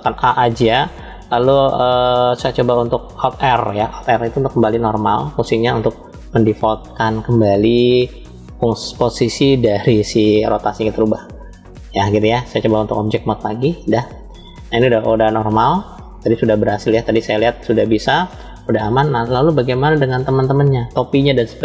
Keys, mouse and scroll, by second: 0.4 a, 3.9 alt+r, 12.0-12.7 drag, 13.4 click, 14.0-18.0 middle drag, 18.1 middle click, 18.2 scroll down 2, 18.7 middle click, 21.3-21.6 scroll up 1.